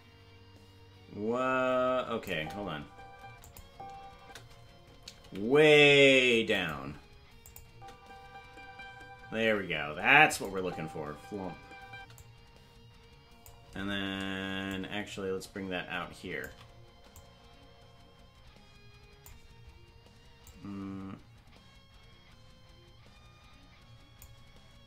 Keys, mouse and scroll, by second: 2.3 space, 3.4 click, 3.4 space, 3.6 space, 5.2 space, 5.2 g, 7.4 click, 7.7 space, 9.2 space, 10.2 click, 10.5 space, 12.1-13.5 drag, 12.1 space, 14.6-16.4 shift+drag, 17.1-19.2 drag, 20.4-24.2 drag.